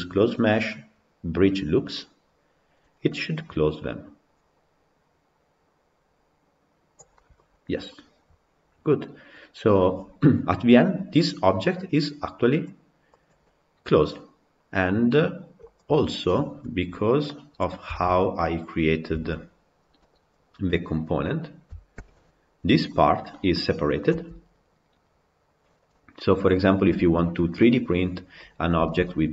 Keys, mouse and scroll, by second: 7.1 middle click, 7.4 scroll down 2, 7.8-10.8 middle drag, 13.1 click, 13.3-17.1 middle drag, 17.1 click, 17.6 scroll down 2, 17.8-18.4 shift+middle drag, 18.4 click, 19.2 Tab, 20.1 click, 21.9 ctrl+l, 22.8-24.1 middle drag, 24.1 g, 27.5 middle click, 28.4 scroll up 1, 28.8-29.3 shift+middle drag.